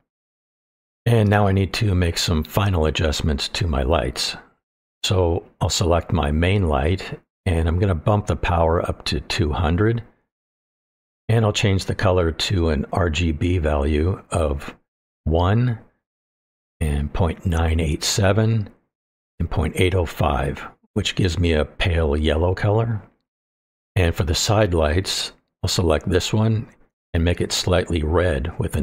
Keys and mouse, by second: 5.5 click, 8.4-10.4 drag, 9.8 KP_0, 12.6 click, 27.3 click.